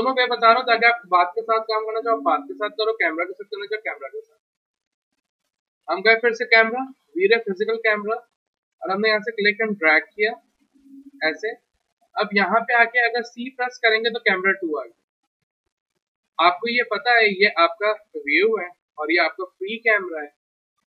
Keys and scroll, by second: 13.5 c, 15.5 w, 18.6 p, 19.8 w.